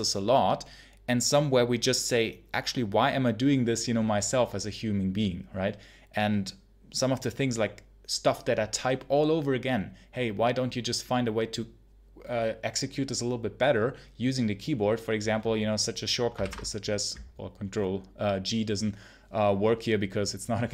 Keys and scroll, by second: 16.3 ctrl+g.